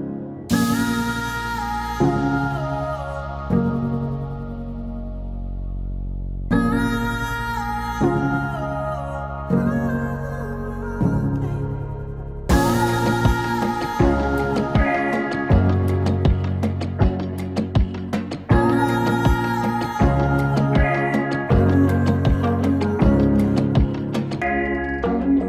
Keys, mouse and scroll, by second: 2.3-4.8 drag, 4.8-11.3 drag, 11.3-19.2 drag, 19.2-23.6 drag, 23.9-25.4 drag.